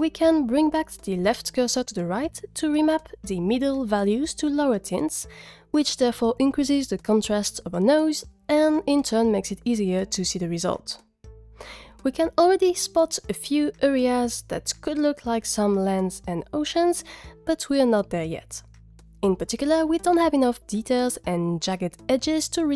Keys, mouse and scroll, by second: 1.7 click.